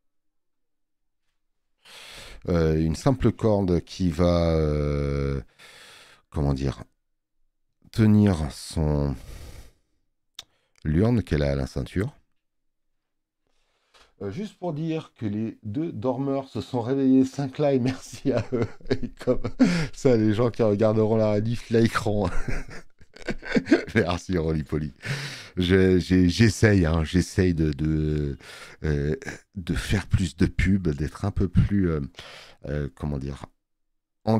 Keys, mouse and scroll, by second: 25.0 space, 25.3 click.